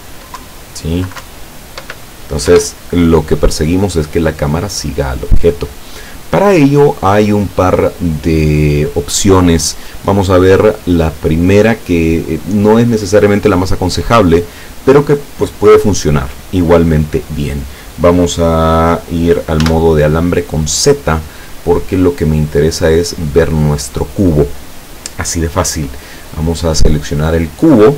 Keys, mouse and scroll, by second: 0.5 Down, 1.3 Up, 2.6 Escape, 5.8 right click, 19.7 z, 22.2 right click.